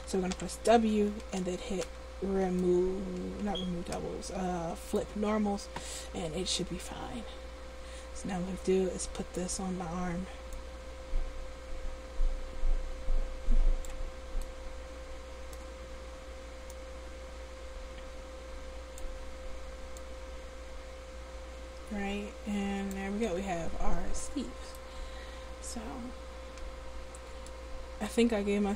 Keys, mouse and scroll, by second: 0.5 w, 7.0-8.7 drag, 10.7-14.1 drag, 16.9-19.2 drag, 20.1-23.1 drag, 23.7 Tab, 27.9-28.7 middle drag.